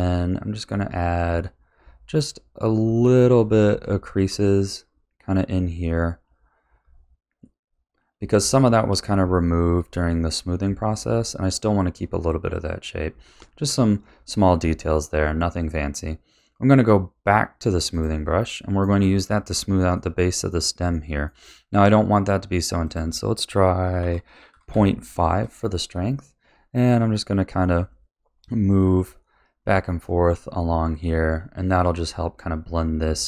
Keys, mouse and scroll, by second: 1.2 middle click, 2.1 click, 2.7 middle click, 3.3 click, 3.8-4.9 shift+middle drag, 4.9 click, 5.4 middle click, 6.2 click, 6.7 middle click, 7.6 click, 8.4-9.5 shift+middle drag, 9.5 click, 10.4 click, 10.9-13.0 middle drag, 13.3 shift+middle click, 14.0-17.0 middle drag, 17.9 click, 18.5 shift+middle click, 19.0-19.9 scroll up 4, 19.9 middle click, 20.9-22.8 shift+middle drag, 22.8 click, 26.5 click, 27.4 middle click, 28.1 click, 28.9 middle click, 29.6 click, 30.6 middle click, 31.3 click, 32.3 middle click.